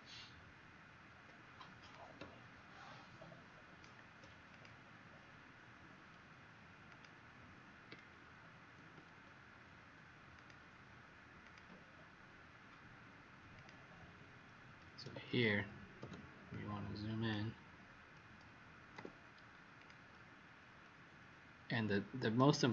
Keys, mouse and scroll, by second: 1.8 click, 4.4 click, 6.8 click, 8.7 ctrl+d, 10.3 click, 15.2 ctrl+z, 15.9 z, 16.4 click, 18.9 v, 19.7 click.